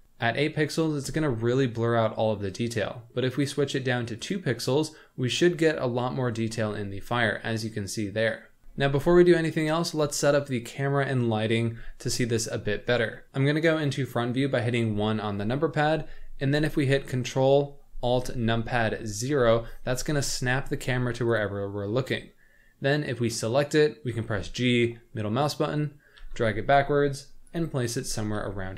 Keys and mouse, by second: 3.4-4.4 drag, 4.4 right click, 6.8-8.6 middle drag, 9.0 z, 13.1 middle click, 13.2 KP_1, 14.9 KP_1, 19.0 ctrl+alt+KP_0, 21.3 click, 24.1 g, 26.2 g, 28.3 g.